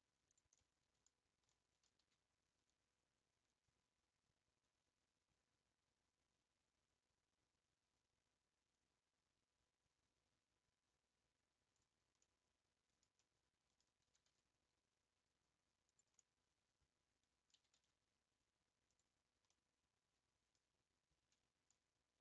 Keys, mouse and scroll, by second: 0.6 middle click, 1.0 scroll down 2, 1.5 middle click, 1.9 g, 12.2-14.0 middle drag, 14.0 g, 14.1 g, 16.2-17.6 middle drag, 17.6 s, 19.6-22.2 middle drag.